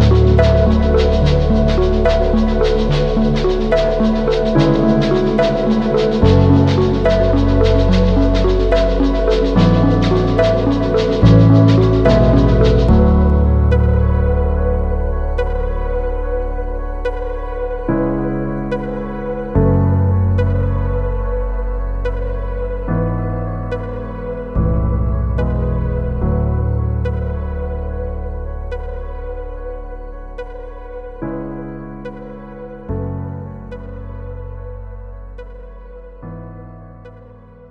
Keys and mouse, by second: 0.3 middle click, 0.9 shift+middle click, 1.9 click, 2.9 click, 4.0 ctrl+click, 4.4 ctrl+e, 4.8 a, 5.3 middle click, 5.9 shift+middle click, 6.9 click, 8.0 ctrl+click, 8.4 ctrl+e, 9.6 a, 10.1 a, 10.3 u, 10.8 a, 11.2 shift+click, 12.2 3, 13.7 2, 14.0 middle click, 14.9 middle click, 15.4 click, 15.6 ctrl+e, 16.5-18.5 typing, 18.8 click, 19.5 ctrl+l, 21.0 h, 21.6 2, 23.0 shift+middle click, 24.0 middle click, 24.8 shift+middle click, 25.8 click, 26.9 ctrl+click, 27.6 middle click, 28.0 shift+middle click, 29.1 shift+click, 30.1 shift+click, 31.3 ctrl+click, 32.0 middle click, 32.5 shift+click, 33.3 shift+click, 33.9 shift+click, 34.8 ctrl+click, 35.5 middle click, 36.4 ctrl+e.